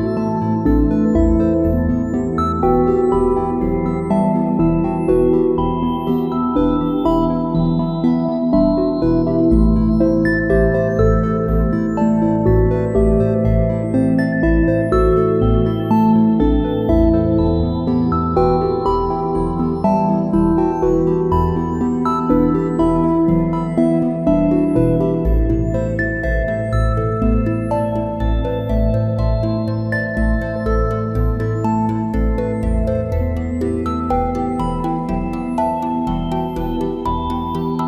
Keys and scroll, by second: 0.6 `, 2.5 space, 7.4 space, 9.3 a, 13.9 space, 16.9 `, 17.3 space, 25.5 space, 28.7 a, 29.1 space, 30.6 space, 36.5 `.